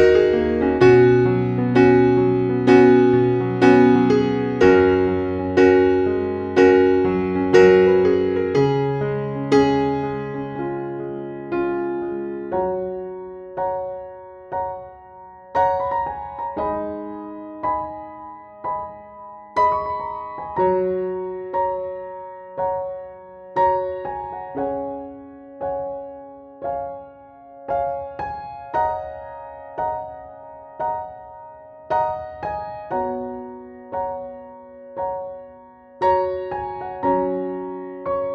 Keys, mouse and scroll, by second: 16.2 scroll down 1, 17.1-17.9 scroll up 1, 17.9 click, 25.4 KP_1, 28.5-29.6 drag, 31.0 KP_1, 33.7 click.